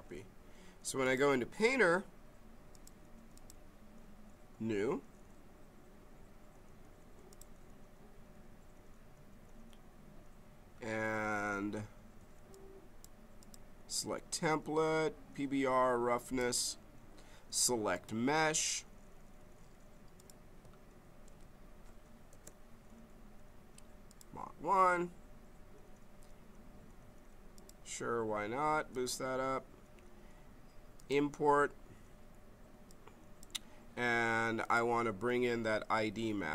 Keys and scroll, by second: 21.2 ctrl+v, 22.3 Return.